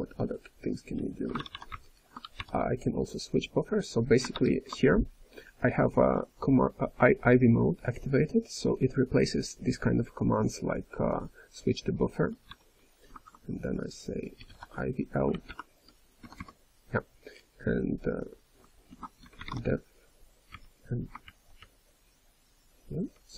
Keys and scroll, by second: 2.1-2.8 typing, 4.2 Return, 4.2 ctrl+s, 4.2 ctrl+n, 4.2 ctrl+p, 4.2 ctrl+a, 4.2 alt+>, 4.2 alt+<, 4.2 ctrl+g, 4.2 BackSpace, 12.5 η, 15.4 Return, 16.2 d, 18.8 ctrl+s, 21.2 ctrl+n, 21.6 ctrl+n, 22.0-22.8 ctrl+n, 23.1-23.3 ctrl+n.